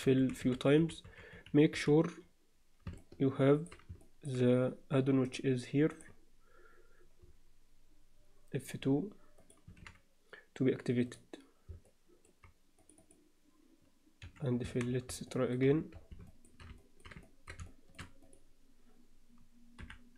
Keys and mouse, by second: 0.0-1.8 typing, 3.0 middle click, 4.0 shift+middle click, 5.4-6.1 drag, 11.8 alt+middle click, 12.8 click, 14.2 f, 14.6 Tab, 15.2-15.6 alt+middle drag, 16.3 shift+middle drag, 16.8 middle drag, 17.2 ctrl+alt+middle click, 17.6-18.0 alt+shift+middle drag, 18.2 click, 19.8 h.